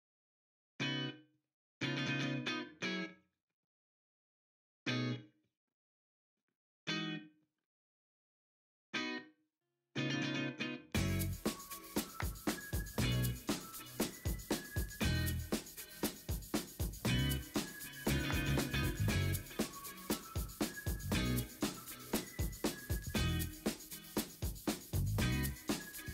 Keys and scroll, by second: 0.5 Up, 0.6 Up, 0.9 Up, 1.1 Up, 1.5-2.9 Down, 2.6 Up, 3.7 Return, 6.1 u, 7.6 ctrl+l, 9.4 ctrl+u, 10.2 v, 11.4 v, 12.9 ctrl+t, 22.0 w, 23.0 w, 23.3-23.7 v, 25.8 Escape.